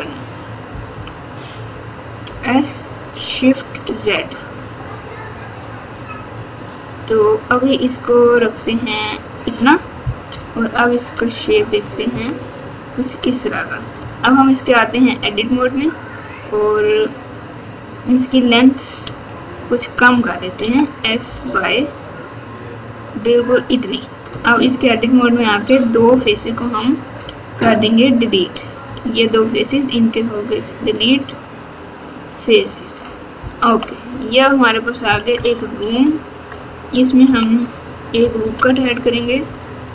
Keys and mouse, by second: 0.9 KP_1, 2.2 s, 10.3 KP_8, 11.4 KP_4, 12.1 KP_4, 14.0 Tab, 15.4 3, 19.0 Tab, 20.6 s, 24.3 Tab, 24.7 click, 26.4 shift+click, 28.8 x, 33.6 KP_2, 34.1 KP_4, 35.0 KP_6, 35.3 KP_Add, 36.5 KP_Add, 37.2-39.9 typing.